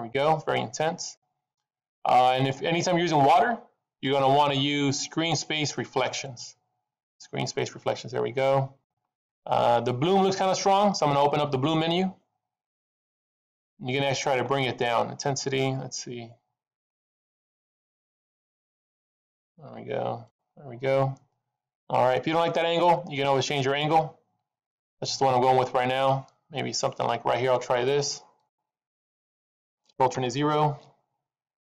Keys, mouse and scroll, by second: 6.5 click, 12.7 click, 15.7 click, 23.0 middle click, 25.1-25.8 scroll up 2, 25.8 middle click, 28.9 middle click, 30.1 ctrl+alt+KP_0.